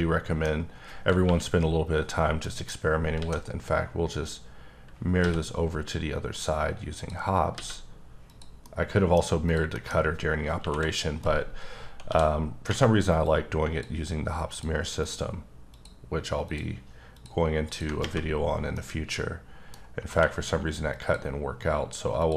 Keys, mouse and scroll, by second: 0.6-1.2 scroll down 1, 1.2 KP_1, 2.4 middle click, 2.8 scroll down 3, 3.1 alt+x, 6.3 click, 7.0 click, 7.5 x, 8.3 click, 8.6 middle click, 9.4 click, 9.7 middle click, 10.6 KP_1, 11.2 scroll down 1, 11.3 scroll up 3, 12.0 d, 13.2 click, 14.6 click, 15.0 double click, 15.7 ctrl+click, 16.4 ctrl+click, 17.1 ctrl+double click, 17.6 ctrl+click, 18.4 scroll down 2, 18.7 middle click, 20.1 q, 20.9 click, 21.7-22.2 scroll down 1, 22.2 click.